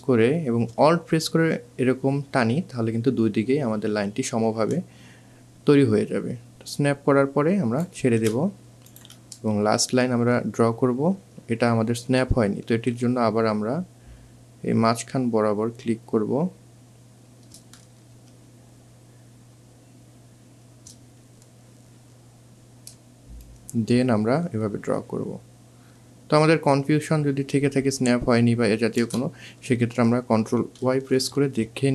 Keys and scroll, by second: 12.5 ctrl+alt+z, 30.8 ctrl+y.